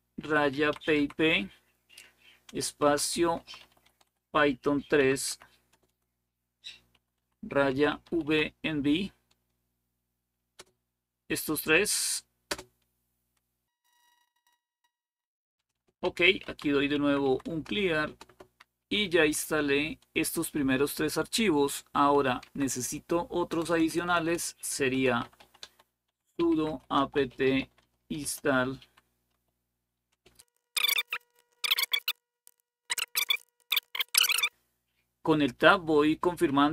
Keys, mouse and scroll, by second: 0.0-1.2 typing, 2.3-8.4 typing, 10.1-10.9 typing, 12.0-12.8 typing, 15.5 Return, 15.6-17.0 typing, 17.3 Return, 17.6 Return, 17.8 Return, 18.1 Return, 18.6 Up, 19.0 Up, 23.3-34.3 typing.